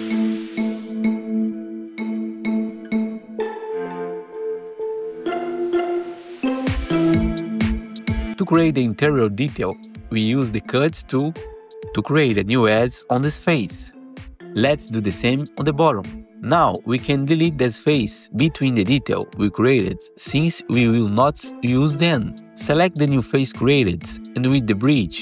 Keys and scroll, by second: 8.3 g, 9.6 alt+c, 16.4 4, 20.2 Delete, 23.9 ctrl+b, 24.7 Return.